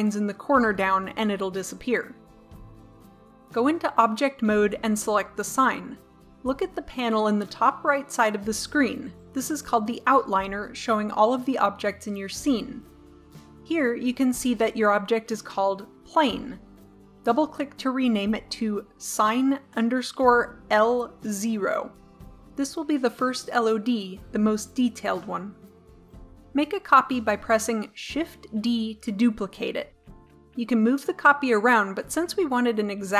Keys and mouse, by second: 4.1 Tab, 16.1-18.2 drag, 28.2 shift+d.